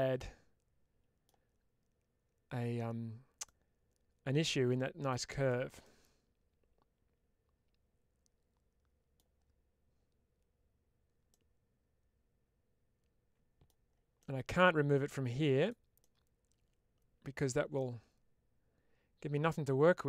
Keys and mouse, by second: 3.4-5.0 middle drag, 5.3 shift+middle click, 5.7-9.0 middle drag, 11.2-13.5 middle drag, 14.0 middle click, 15.5 click, 15.9-17.2 middle drag, 17.6-20.0 middle drag.